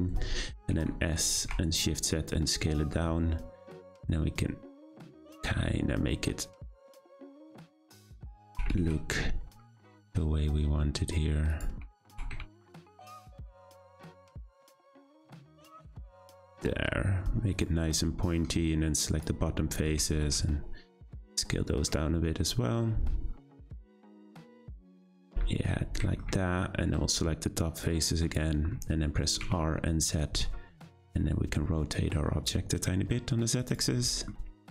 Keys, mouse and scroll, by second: 0.7 s, 8.5 s, 17.9-19.0 middle drag, 19.0 click, 20.0 s, 24.1 Tab, 24.4-25.3 middle drag, 25.3 Tab, 26.0 shift+middle click, 26.7 scroll up 3, 27.8 click, 28.7-29.1 scroll down 6, 29.4 r, 34.0 middle click, 34.4-34.7 scroll up 2.